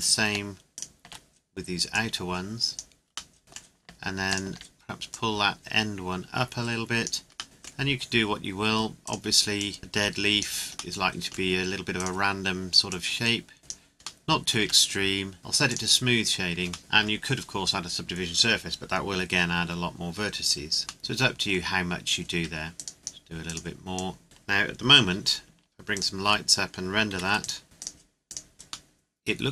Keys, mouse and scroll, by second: 1.9 click, 3.3 middle click, 4.3 alt+right click, 5.1 click, 5.1 click, 7.4 middle click, 9.0 right click, 9.6 click, 11.0 middle click, 12.0 right click, 12.9 click, 14.6 Tab, 15.7 click, 16.8 middle click, 21.0 middle click, 22.3 Tab, 22.8 right click, 23.0 click, 23.4 right click, 24.0 click, 24.2 KP_7, 25.9 shift+click, 27.1 ctrl+s, 27.4 click, 28.9 middle click.